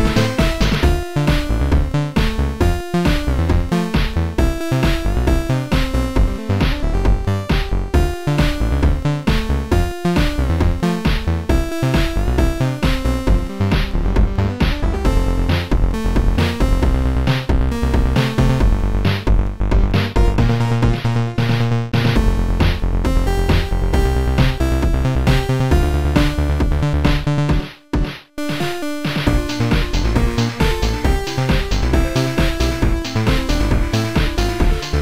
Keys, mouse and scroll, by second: 0.4 click, 2.6 click, 2.6 click, 3.5 click, 3.6 click, 4.8 click, 5.1 click, 8.5 click, 10.9 click, 11.5 click, 12.4 click, 13.5 click, 14.6 click, 14.9 click, 17.1 click, 18.5 click, 18.8 click, 19.5 click, 20.5 click, 21.6 click, 26.0 click, 26.2 click, 26.9 click, 27.6 click, 28.3 click, 30.9 click, 33.5 click.